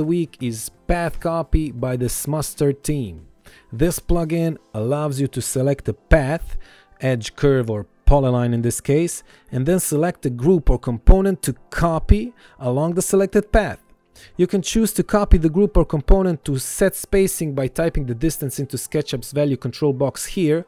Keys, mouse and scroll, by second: 15.6 KP_1, 16.0 KP_0, 16.3 Return, 17.0 click, 17.7 KP_5, 17.8 KP_0, 18.2 Return, 19.0 click, 19.4 KP_3, 19.4 KP_0, 19.5 Return, 20.5 click.